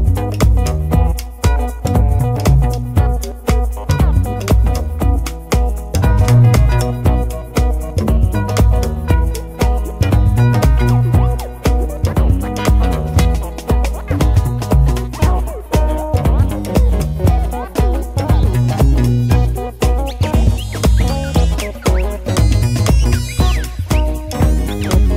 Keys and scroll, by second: 4.0 Return.